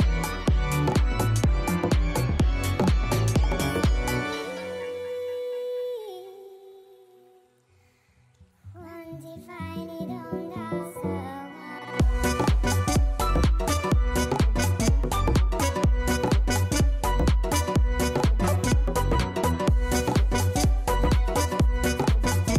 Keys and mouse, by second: 4.7 click, 6.0 click, 15.6 click, 16.2 click, 17.0 Return, 17.9 click.